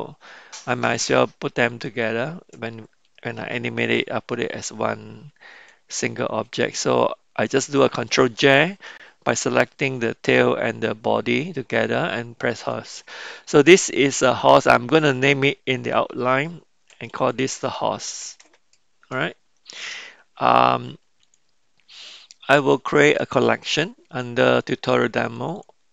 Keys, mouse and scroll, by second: 1.7 shift+click, 5.9 ctrl+j, 14.0-19.6 drag, 21.2 click, 23.2 click, 25.2 click, 25.5-25.9 drag.